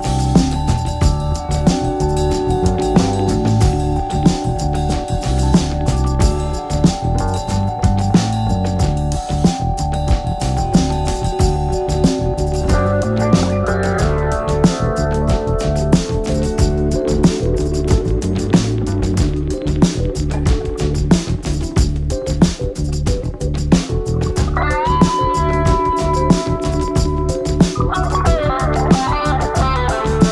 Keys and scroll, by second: 0.6 ctrl+e, 5.2 ctrl+m.